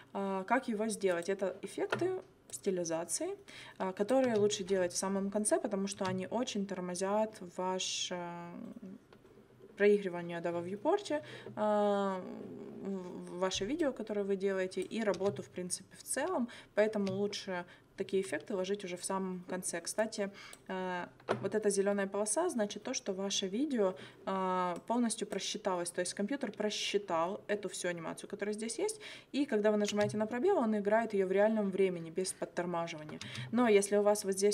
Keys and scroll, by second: 4.2 space, 6.0 space, 15.2 space, 16.9 space, 29.9 space, 33.3 space.